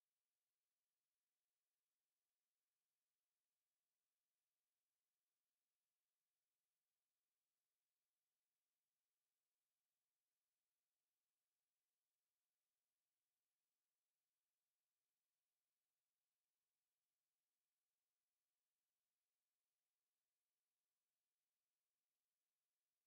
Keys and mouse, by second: 0.7-4.2 middle drag, 4.2 Tab, 5.1 KP_Divide, 6.5 a, 8.7 a, 9.4-10.8 drag, 11.0 Tab, 13.5 a, 15.2 z, 17.8 KP_5, 22.0 z.